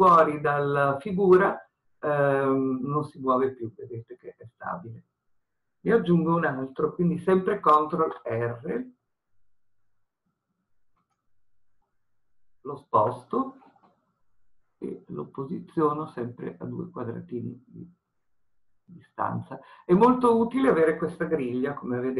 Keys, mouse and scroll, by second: 7.9 ctrl+r, 20.6 click.